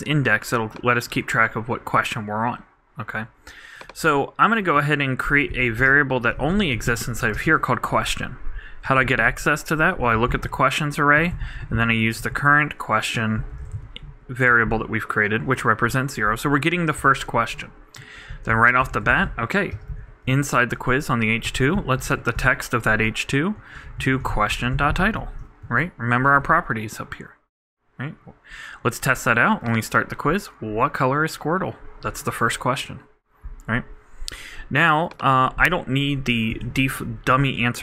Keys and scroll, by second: 11.7-12.7 typing, 17.9-19.0 typing, 20.2 super+2, 20.4 super+Right, 21.4 super+., 21.9-22.8 typing, 25.1 super+e, 25.2 super+Right, 36.8 shift+Return, 36.9-37.8 typing.